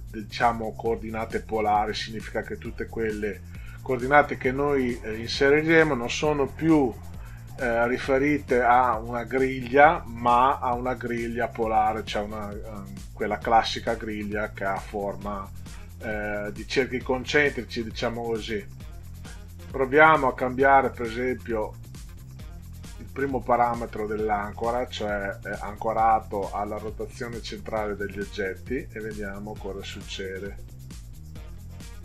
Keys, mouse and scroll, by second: 27.9 click.